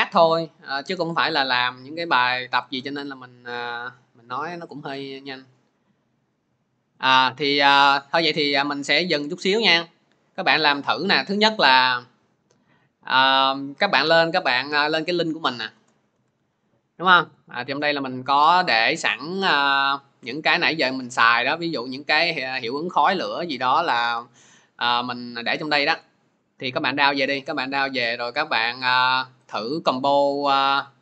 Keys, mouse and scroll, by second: 2.5 alt+Tab, 6.3 click, 8.5-14.7 drag, 14.7 alt+Tab, 15.6 alt+Tab, 16.0 alt+Tab, 17.3 click, 18.0-18.4 scroll, 18.7-19.1 scroll, 19.4-20.4 scroll, 21.1 scroll, 22.0 scroll down 11, 22.1 click, 22.2 middle click, 22.3 click, 27.3 click, 28.4 click.